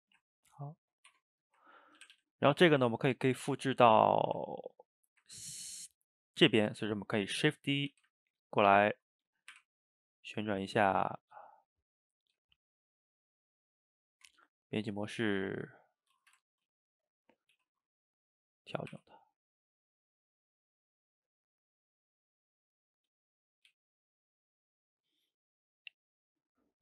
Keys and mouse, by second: 1.1 Tab, 1.7-2.0 ctrl+middle drag, 2.0 a, 2.2 a, 2.5-3.9 middle drag, 3.9 click, 4.2 shift+right click, 4.4-7.9 ctrl+middle drag, 7.9 shift+d, 9.6 r, 10.8-12.4 middle drag, 12.4 g, 14.3 Tab, 15.1 click, 15.3-16.2 middle drag, 16.2 shift+right click, 16.5-17.5 ctrl+shift+middle drag, 17.5 g, 18.9 r, 21.3 click, 21.6-23.2 middle drag, 23.2 shift+click, 23.3 middle click, 23.7 g, 26.0-26.8 middle drag.